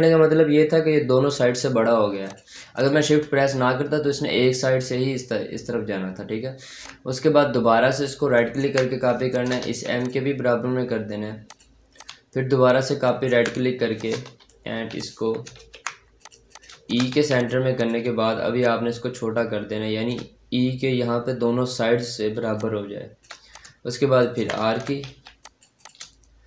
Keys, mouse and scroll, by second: 2.1 click, 6.7-8.2 drag, 8.2 ctrl+right click, 9.2 shift+click, 9.5 c, 9.9 click, 10.5-10.9 scroll down 1, 10.9-11.3 scroll up 1, 11.3 click, 12.9 right click, 13.5 scroll up 1, 13.8 shift+click, 14.8 click, 15.5 ctrl+z, 16.1 click, 16.9 shift+click, 17.0 c, 17.2 click, 18.5-20.2 shift+drag, 20.2-20.7 scroll up 1, 21.6-22.3 scroll down 1, 22.4-24.1 shift+drag, 24.1 ctrl+right click, 24.6 shift+click, 24.9 c, 25.3 click.